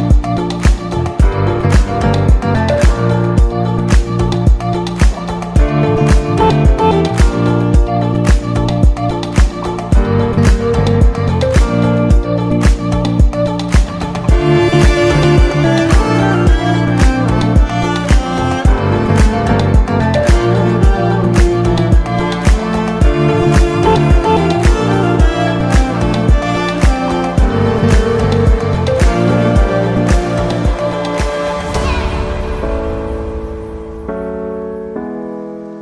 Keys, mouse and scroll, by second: 3.0-5.3 drag, 5.3-5.9 scroll down 2, 5.9 click, 6.3-6.9 scroll down 2, 6.9 click, 7.2-7.8 scroll down 2, 7.8-10.9 drag, 13.6 BackSpace, 15.2 KP_Enter, 17.7 ctrl+s, 17.9 alt+a, 18.3-18.8 shift+middle drag, 18.8 ctrl+s, 18.9 scroll down 2, 19.1-19.8 middle drag, 19.8 ctrl+s, 20.6 click, 21.6 click, 22.7-25.8 drag, 29.1 KP_Enter, 30.7-31.8 drag, 31.8 KP_Enter, 32.7 alt+a, 33.1 ctrl+s, 33.5 click, 34.1 ctrl+s.